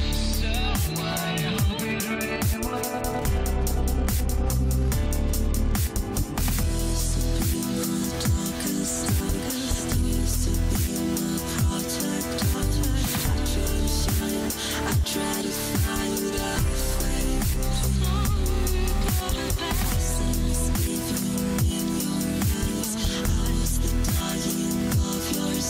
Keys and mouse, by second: 0.4 click, 1.3 click, 1.6 click, 2.2 click, 2.8 click, 3.2 click, 4.1 click, 4.6-6.8 drag, 21.2 n, 22.9-25.6 drag.